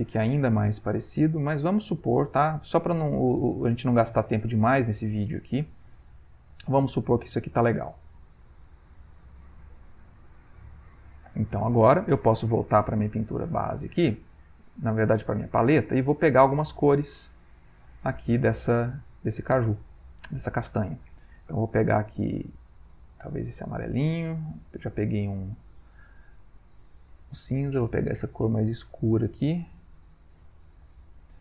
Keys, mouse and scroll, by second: 0.7 click, 1.9-2.9 drag, 3.1 click, 4.3-5.3 drag, 6.0 click, 7.1 click, 8.0 Delete, 8.8 click, 9.7 click, 12.6 click, 13.1-14.7 middle drag, 15.1 click, 15.6 middle click, 16.2 ctrl+middle click, 17.6 ctrl+click, 19.1 middle click, 19.6-19.9 scroll up 1, 19.9-21.6 drag, 23.3 ctrl+click, 24.7-26.1 drag, 27.7-29.1 ctrl+drag, 31.3-31.4 drag, 31.3-31.4 middle drag.